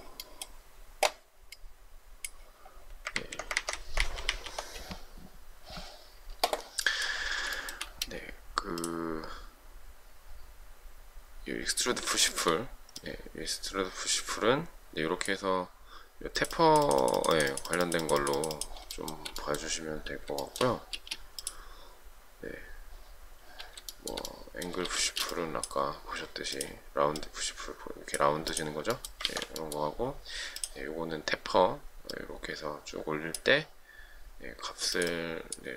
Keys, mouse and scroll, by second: 3.2 ctrl+z, 3.6 ctrl+z, 7.6 shift+middle click, 12.3 shift+middle click, 19.0 shift+middle click, 19.2 shift+double middle click, 20.5 shift+middle click, 21.0 space, 24.0 shift+middle click, 25.1 space, 29.3 ctrl+z.